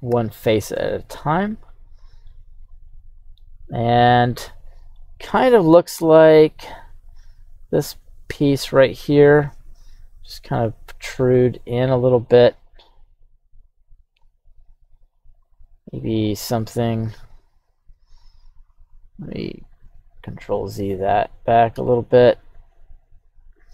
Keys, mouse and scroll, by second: 0.1 q.